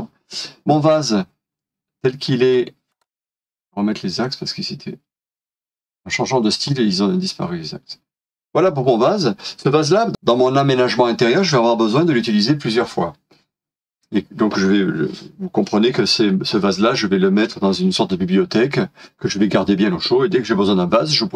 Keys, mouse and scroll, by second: 2.2 scroll down 1, 3.0 shift+middle click, 5.4 middle click, 9.8 scroll down 1.